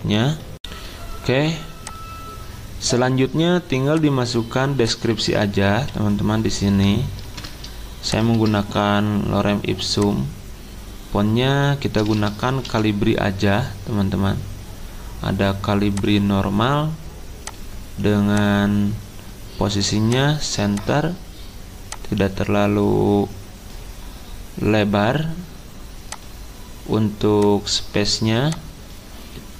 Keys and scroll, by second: 7.2 ctrl+v, 8.3 ctrl+a, 12.6 c.